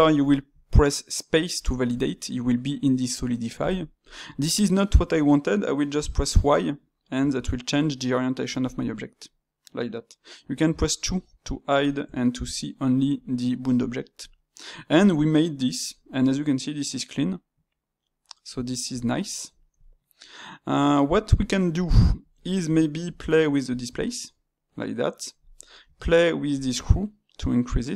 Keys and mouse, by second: 3.8-25.5 middle drag.